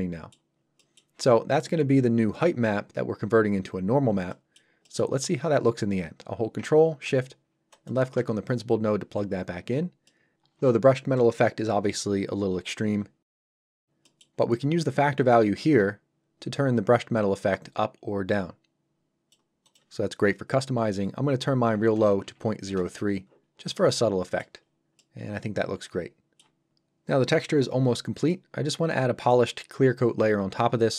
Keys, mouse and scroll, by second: 0.5 scroll down 1, 0.8 middle click, 3.8 scroll down 1, 4.3 middle click, 9.7 shift+scroll up 2, 10.0 middle click, 13.6 scroll up 1, 14.0 middle click, 15.2 click, 19.6 click, 22.6 Return, 23.4 scroll up 1, 23.7 middle click, 24.6 scroll down 1, 25.0 middle click, 28.3 middle click, 30.7-30.9 scroll down 1.